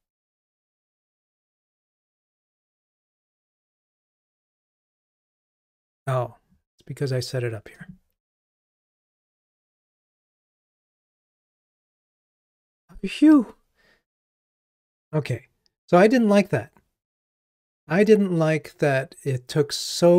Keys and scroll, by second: 9.4 ctrl+r.